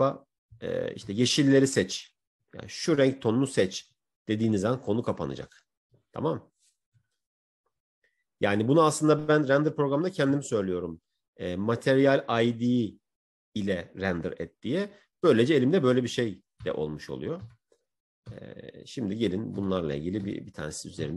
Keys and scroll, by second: 2.1 Right, 3.5 Right, 19.9 Right.